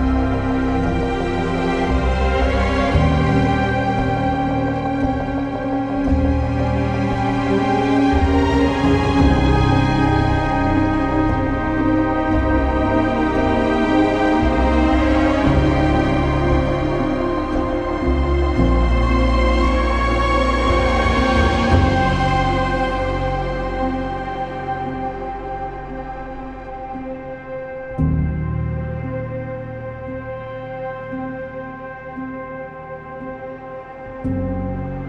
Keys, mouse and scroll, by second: 3.6 ctrl+z, 7.8 ctrl+z, 7.8 ctrl+s, 12.7 ctrl+s, 14.1-14.5 typing, 20.4-20.7 typing, 26.2 ctrl+s, 26.4 z, 26.6 click, 27.9 b, 29.9 b, 30.0 ctrl+z, 31.1 ctrl+s, 31.6-34.2 typing, 33.2 ctrl+s, 33.6 click.